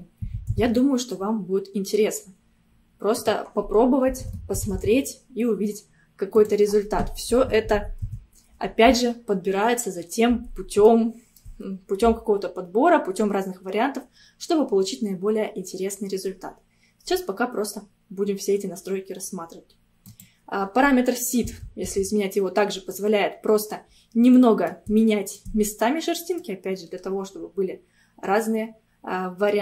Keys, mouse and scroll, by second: 1.9 scroll up 1, 3.2-6.2 drag, 6.4-9.5 drag, 10.9-14.1 shift+middle drag, 20.1-23.1 drag, 23.5-23.9 scroll down 2, 24.4-28.7 middle drag.